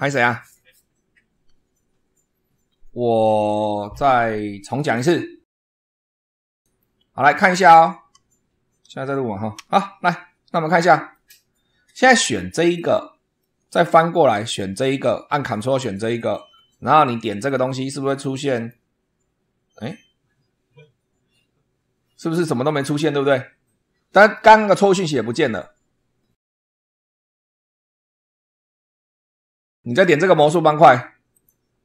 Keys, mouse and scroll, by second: 3.9 scroll up 2, 3.9 scroll down 2, 4.7 scroll down 2, 6.4 shift+middle click, 9.5 super+2, 10.6 click, 12.7 click, 13.3-14.7 middle drag, 16.1 ctrl+click, 17.4 click, 18.5 click, 31.3 click.